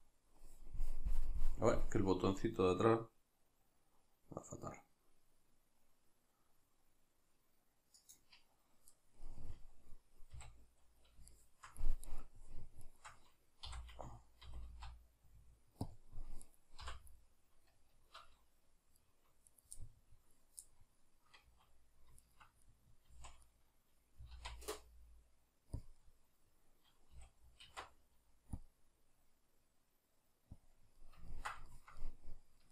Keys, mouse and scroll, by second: 8.1 click, 9.3-12.1 middle drag, 10.3 a, 12.1 right click, 12.8 shift+right click, 13.7 e, 15.9 click, 16.5 right click, 16.8 l, 17.2-19.4 middle drag, 19.4 right click, 19.8-22.2 middle drag, 21.4 z, 22.2 shift+right click, 22.6-25.9 middle drag, 23.1 z, 24.2 g, 25.9 click, 26.0-30.7 middle drag, 27.1 a, 30.7 click, 31.0-32.7 middle drag.